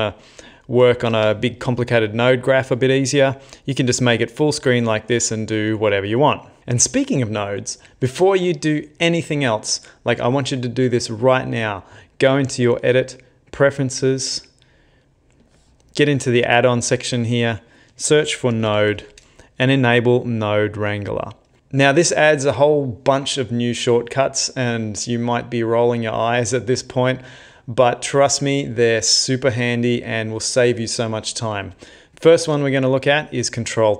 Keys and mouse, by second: 0.4 middle click, 1.1 ctrl+space, 1.7 middle click, 2.2 ctrl+middle click, 3.0 middle click, 3.6 middle click, 4.5 middle click, 4.7 middle click, 5.5 middle click, 13.7 click.